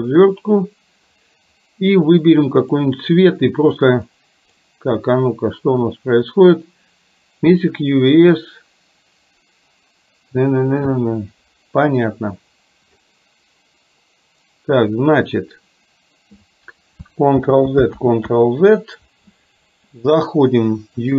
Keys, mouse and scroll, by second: 2.7 click, 3.9 click, 17.5 ctrl+z, 18.2 ctrl+z.